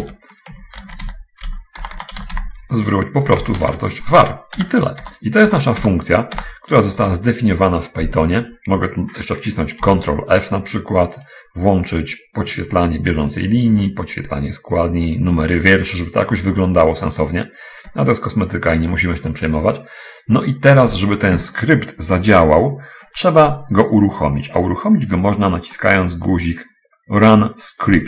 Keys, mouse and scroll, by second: 0.0-2.4 typing, 0.4 Return, 0.8 Tab, 3.7-6.2 typing, 5.0 Return, 7.2 Return, 9.8 ctrl+f, 11.2 click, 12.8 click, 15.2 click, 18.2 click, 26.1-27.5 middle drag.